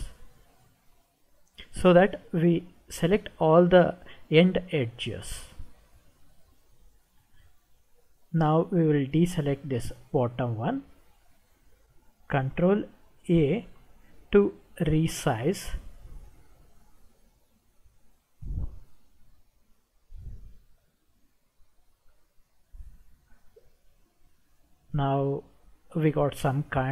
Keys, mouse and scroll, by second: 7.0-8.7 middle drag, 10.2 shift+click, 13.6 ctrl+a, 20.2-26.9 middle drag.